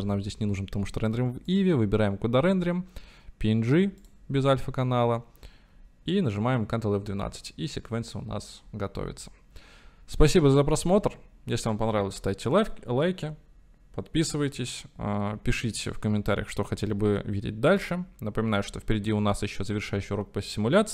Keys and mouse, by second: 1.6-5.8 drag.